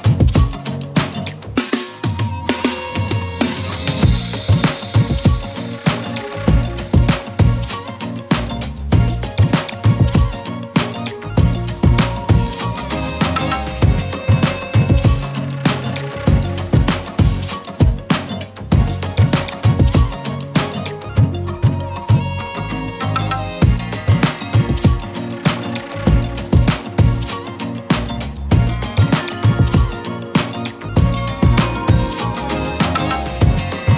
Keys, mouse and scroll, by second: 0.2-1.0 drag, 1.1-1.5 drag, 1.5 scroll down 3, 1.6-1.9 shift+middle drag, 1.9-3.0 drag, 3.0-3.5 middle drag, 3.5 g, 5.3 scroll up 3, 5.4 shift+middle click, 6.6 Tab, 6.9 middle click, 7.3 a, 7.8 r, 8.9 Tab, 9.1 scroll down 1, 9.1-9.9 middle drag, 9.9 KP_1, 10.2 Tab, 10.6 r, 11.2 Tab, 11.4-12.2 middle drag, 12.3 g, 13.0 Tab, 13.2 middle click, 13.5 KP_1, 13.8 r, 14.2 Tab, 14.3 middle click, 15.1 scroll up 4, 15.2-16.6 shift+middle drag, 17.1 click, 17.7 scroll down 4, 17.8 middle click, 18.6 scroll down 3, 18.8 shift+middle click, 19.9 click, 20.8 click, 21.7-22.6 scroll up 12, 21.8 shift+middle click, 22.6-23.8 drag, 23.8-24.1 scroll down 15, 24.1-24.5 shift+middle drag, 24.5 click, 24.6-25.1 scroll up 4, 25.1-25.8 middle drag, 27.3 scroll down 1, 27.5 shift+middle drag, 27.7 click, 28.5 Tab, 29.0 click, 29.5 ctrl+l, 29.7 x, 30.8 Tab, 32.3 shift+click, 32.5-32.8 middle drag, 32.8 KP_1, 33.2 click, 33.6 Tab, 33.9 alt+z.